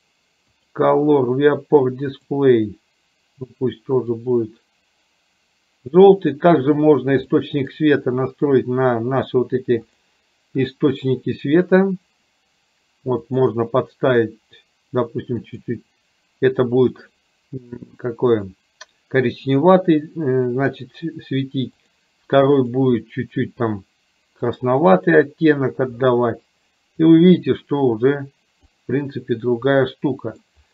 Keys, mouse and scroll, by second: 7.5 middle click, 13.3 click, 21.8 click, 22.7 click, 28.8 click, 29.8-30.6 middle drag.